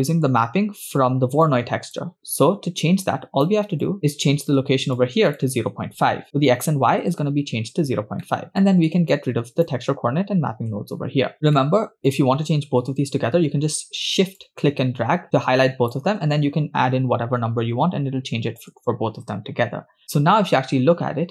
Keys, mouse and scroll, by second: 1.4 click, 3.1 click, 3.8 click, 4.1 scroll up 2, 5.0-7.1 shift+drag, 8.2 middle click, 8.6 middle click, 9.1-9.7 drag, 10.9 x, 11.5 scroll down 2, 11.6 middle click, 14.4-18.8 shift+drag, 20.8-21.3 scroll up 8.